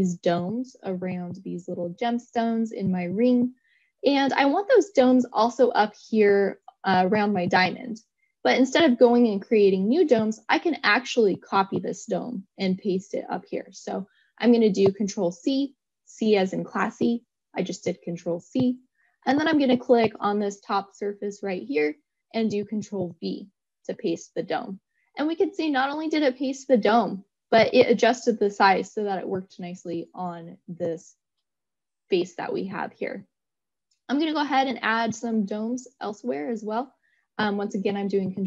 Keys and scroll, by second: 22.3 ctrl+v.